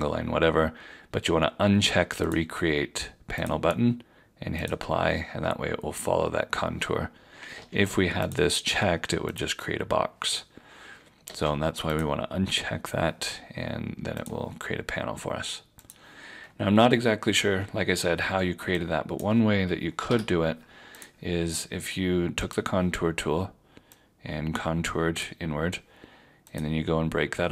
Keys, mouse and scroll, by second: 7.5 ctrl+z, 8.3 click, 11.3 ctrl+z, 11.9 click, 20.0 Delete, 21.0 click.